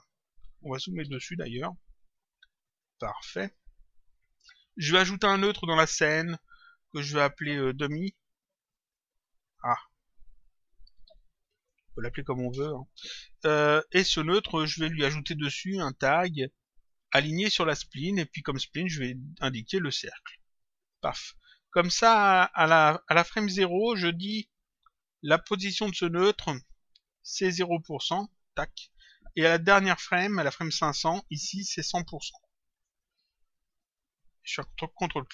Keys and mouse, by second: 1.0 s, 2.6 click, 5.5 click, 7.1 click, 8.6 click, 10.5-12.4 typing, 12.5 Return, 14.8 right click, 17.6 click, 20.0 click, 23.1 click, 28.4 ctrl+click, 29.9 click, 31.5 click, 33.7 click, 34.9 ctrl+click.